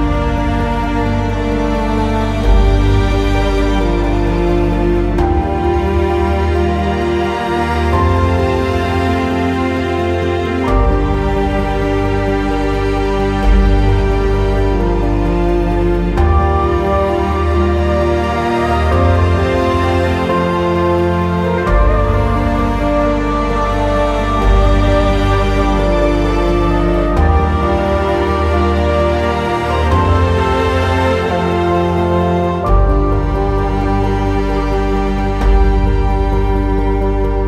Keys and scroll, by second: 0.8 w, 2.3 ctrl+z, 22.0 Delete, 26.9 Delete.